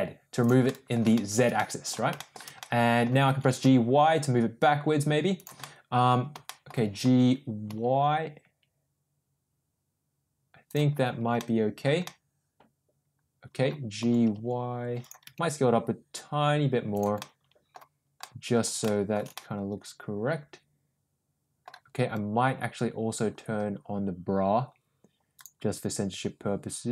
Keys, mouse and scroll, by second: 0.6 middle click, 1.0 shift+middle click, 1.5 middle click, 2.1 middle click, 2.6 middle click, 3.2 g, 5.5-6.0 middle drag, 6.4 shift+middle click, 6.9 g, 11.3 middle click, 12.0-13.7 middle drag, 13.9 g, 15.2 s, 17.1-17.7 middle drag, 18.2 middle click, 18.9 shift+middle click, 19.3-21.6 middle drag, 25.6 click.